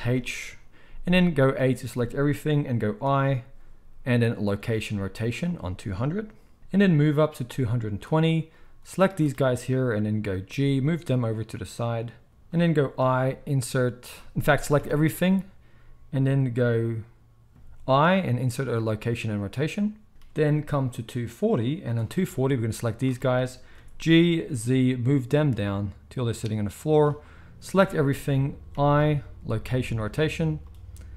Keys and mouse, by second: 0.1 alt+h, 1.6 a, 3.0 i, 6.7-12.3 drag, 10.3 g, 12.3-20.8 middle drag, 13.0 i, 14.7 a, 18.0 i, 20.8-26.9 drag, 23.7 g, 26.9-31.1 shift+middle drag, 27.7 a, 28.7 i.